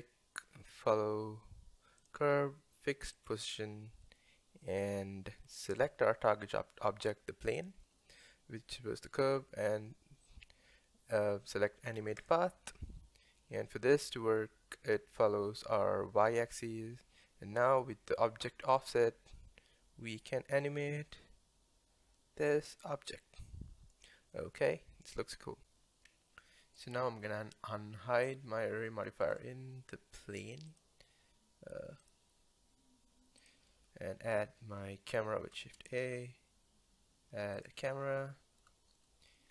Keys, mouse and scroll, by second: 2.0 click, 3.2 click, 4.0-5.8 middle drag, 5.8-8.3 drag, 8.3-11.3 middle drag, 12.2 click, 18.7-22.0 drag, 24.3-25.6 middle drag, 26.1-26.4 scroll down 1, 26.4-26.8 middle drag, 26.8 click, 29.2 click, 30.7 click, 32.0 click, 33.4 click, 34.8 middle click, 35.6 shift+a, 38.2-39.5 shift+middle drag.